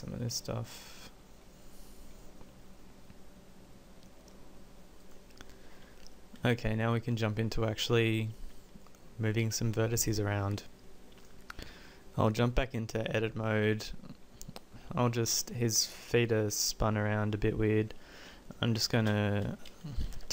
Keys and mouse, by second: 0.9-2.6 middle drag, 8.6 middle click, 10.4 Tab, 11.7 Tab, 19.1 space.